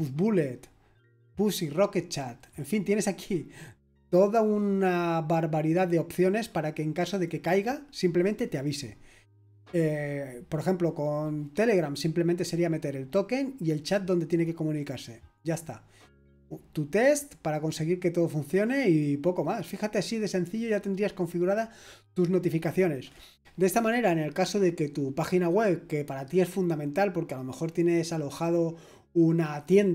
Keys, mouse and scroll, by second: 2.2-7.2 scroll down 1, 7.2-14.2 drag, 14.2-15.0 scroll down 1, 19.4-29.9 scroll up 1.